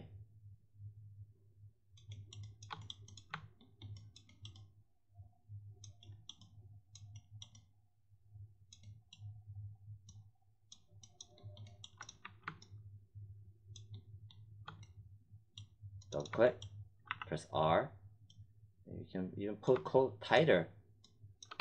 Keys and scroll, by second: 12.1 1, 17.0 r, 21.5 3.